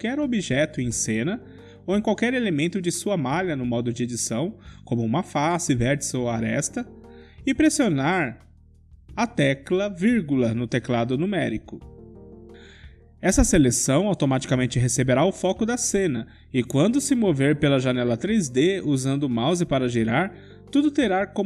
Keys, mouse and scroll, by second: 1.1 KP_Decimal, 2.0-4.0 middle drag, 8.6 click, 9.2 Tab, 10.6-12.3 middle drag, 11.8 1, 14.1 KP_Decimal, 15.2-17.2 middle drag, 21.0-21.4 middle drag.